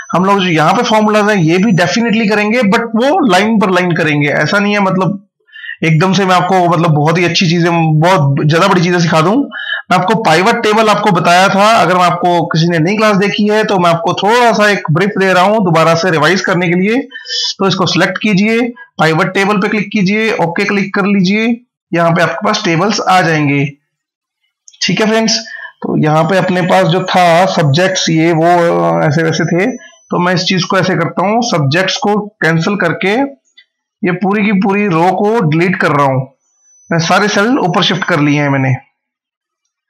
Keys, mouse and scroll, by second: 10.4 click, 15.8 click, 23.7 click, 30.0 click, 31.8 Delete, 33.1 right click, 34.8 click.